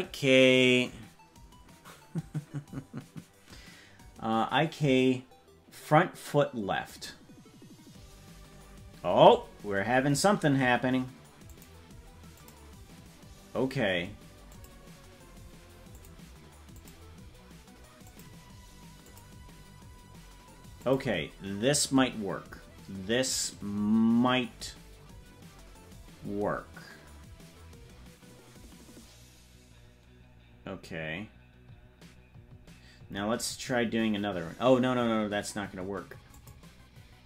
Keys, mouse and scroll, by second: 11.5 click, 12.4 click, 14.5 click, 16.0 click, 16.7 click, 18.1 click, 19.1 click, 20.9 click, 36.4 click.